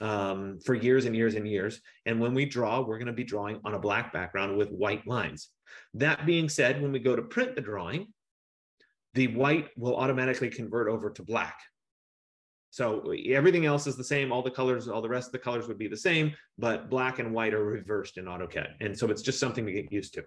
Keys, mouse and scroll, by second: 3.1 F15.